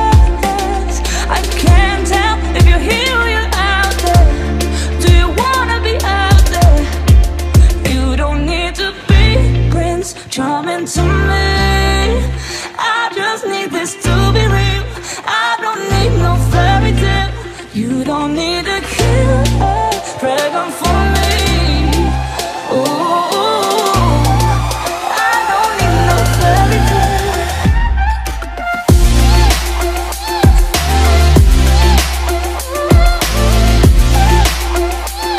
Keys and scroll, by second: 4.6 space, 18.0 ctrl+z, 30.6 ctrl+z.